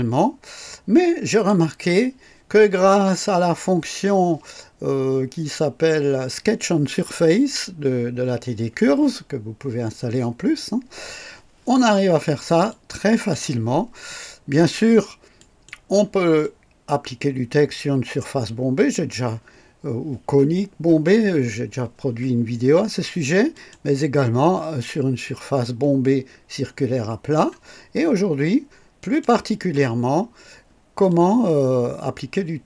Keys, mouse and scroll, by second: 1.3 click, 12.7-13.5 drag, 15.4 click, 16.4-19.3 drag, 23.5 click, 25.2-27.5 drag, 29.0 click, 30.1 scroll up 2, 31.1-32.6 drag.